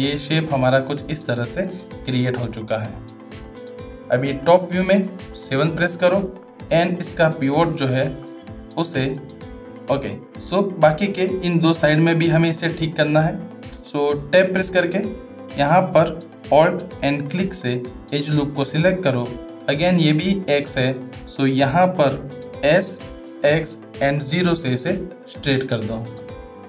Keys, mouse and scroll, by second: 1.7-2.9 middle drag, 5.5 KP_7, 6.9 middle click, 7.9 middle drag, 9.7 shift+middle drag, 11.1 shift+middle drag, 14.1 Tab, 17.3 alt+click.